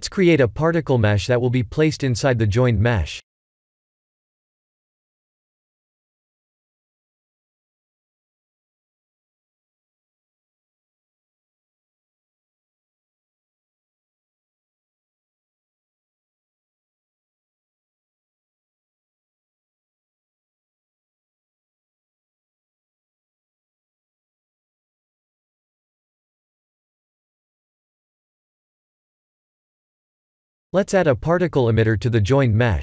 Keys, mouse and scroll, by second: 0.4 shift+a, 7.1-9.3 drag, 11.1 ctrl+3, 12.1 ctrl+1, 14.0-14.6 right drag, 16.0 s, 18.5 click, 20.1 g, 20.6 z, 21.2 click, 21.9 KP_1, 22.1 KP_1, 25.4-26.0 middle drag, 26.8 click, 27.6 KP_0, 28.0 KP_0, 28.2 KP_0, 31.7 click.